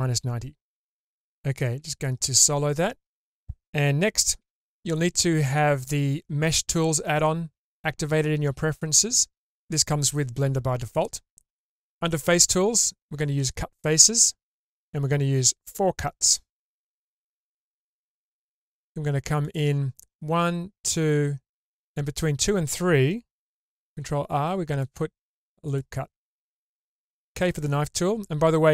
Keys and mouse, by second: 1.6 /, 4.4 Tab, 13.3 click, 19.4 click, 23.7 ctrl+r, 27.2 k.